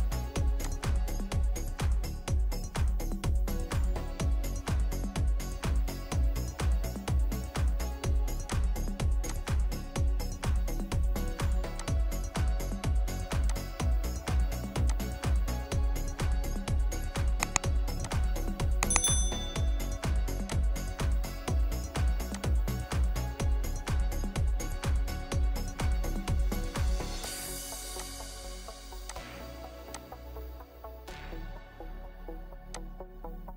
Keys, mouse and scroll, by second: 1.3 scroll up 1, 1.3 scroll down 1, 1.6 middle click, 2.1 scroll down 1, 2.6-5.3 scroll up 1, 5.5-7.7 scroll up 1, 7.7 middle click, 10.7 right click, 12.1-12.8 scroll up 1, 15.5-17.9 scroll down 1, 27.3 Escape, 31.0 typing, 31.6 Return, 33.2 scroll down 1.